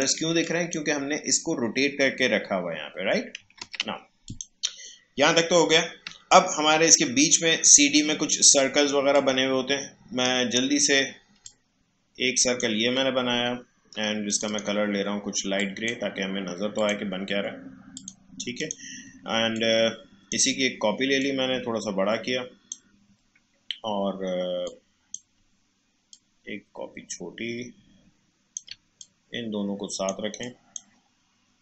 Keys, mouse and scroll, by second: 3.4 click, 3.6 ctrl+z, 4.2 click, 6.0 space, 9.1-11.4 drag, 19.5-31.6 alt+drag.